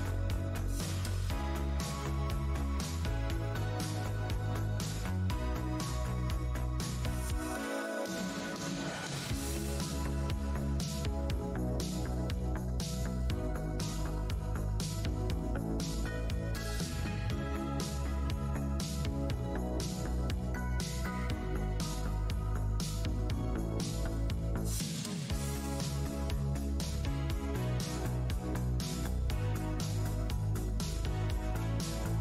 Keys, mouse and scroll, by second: 0.3 alt+scroll down 1, 0.6 shift+d, 1.4 click, 3.5 Tab, 3.6-3.9 scroll down 1, 4.3 alt+Tab, 4.4 scroll up 1, 5.1 space, 6.0 shift+Tab, 6.7 Tab, 7.0 right click, 7.0 right click, 7.4 click, 7.8 Delete, 8.4 Tab, 9.0 Tab, 9.7 Tab, 10.0 ctrl+click, 10.2 ctrl+Tab, 10.2 space, 11.0 alt+Tab, 11.5 Tab, 12.1 Tab, 12.4 Tab, 13.5 alt+click, 13.7 alt+Tab, 13.8 alt+scroll up 1, 14.4 alt+scroll up 1, 14.4 space, 14.9 Tab, 15.4-17.1 scroll up 5, 16.1 `, 18.3 scroll up 1, 18.3 shift+v, 18.9 Tab, 19.0 e, 19.5 click, 20.5 Tab, 20.6 w, 21.2 Tab, 21.2 w, 21.8 click, 21.9 Tab, 22.8 click, 25.7 Tab, 26.6 click, 26.7 Tab, 27.6 click, 28.7 w, 29.2 shift+x, 31.8 click, 31.9 Tab.